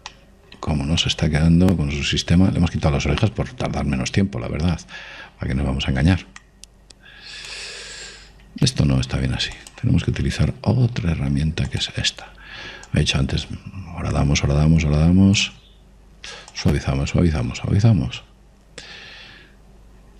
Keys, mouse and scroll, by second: 4.9-6.8 scroll up 1, 6.8-7.8 middle drag, 7.8 click, 9.8 ctrl+z, 10.6 click, 13.9 click, 17.6 click.